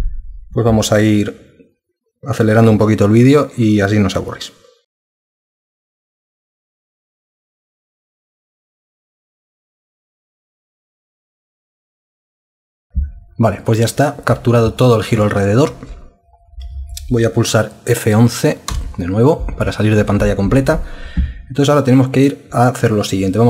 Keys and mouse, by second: 5.0 alt+click, 5.3 super+Print, 5.5 alt+click, 5.8 super+Print, 6.2 super+Print, 6.5 alt+click, 6.8 super+Print, 6.9 alt+click, 7.2 super+Print, 7.5 super+Print, 7.7 alt+click, 7.9 super+Print, 8.1 alt+click, 8.4 super+Print, 8.5 alt+click, 9.2 super+Print, 9.9 alt+click, 10.3 super+Print, 10.4 alt+click, 10.7 super+Print, 10.8 alt+click, 10.9 alt+click, 11.1 super+Print, 11.5 super+Print, 11.6 alt+click, 11.8 super+Print, 11.9 alt+click, 12.1 super+Print, 12.2 alt+click, 12.4 super+Print, 12.7 super+Print, 18.7 F11.